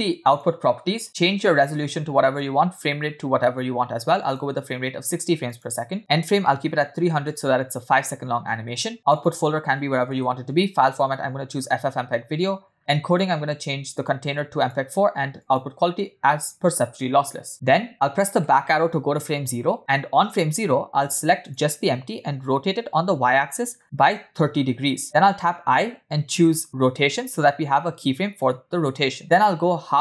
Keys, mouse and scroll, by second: 0.4 click, 2.6-4.5 drag, 6.7 click, 7.2 0, 8.4-9.1 scroll down 1, 9.1-9.9 scroll down 2, 9.9 click, 10.2 /, 12.0-12.5 drag, 13.1 scroll down 3, 13.3 click, 14.0 scroll down 1, 14.0-15.4 drag, 15.7 click, 17.9-18.4 scroll down 1, 18.9 Left, 19.9 middle click, 19.9-20.7 scroll down 2, 20.7-21.4 scroll up 1, 21.6 click, 23.1 r, 25.3 i.